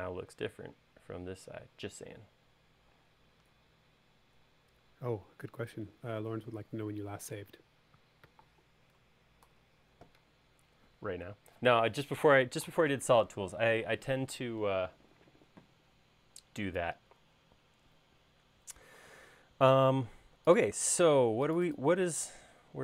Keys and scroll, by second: 9.5 super+s.